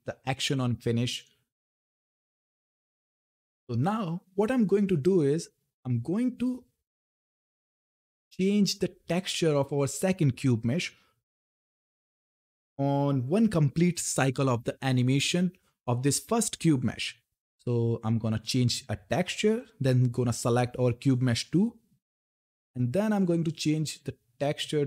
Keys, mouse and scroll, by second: 2.3 Left, 3.5 click, 6.8 scroll down 1, 7.6 click, 18.2 click.